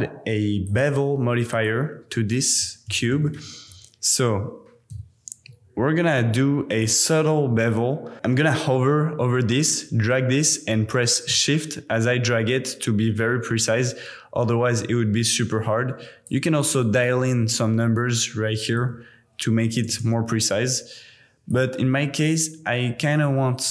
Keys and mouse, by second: 0.8-5.0 drag, 6.9-8.1 shift+drag, 11.4-16.4 shift+drag, 16.6-20.0 drag, 21.6-23.7 shift+drag.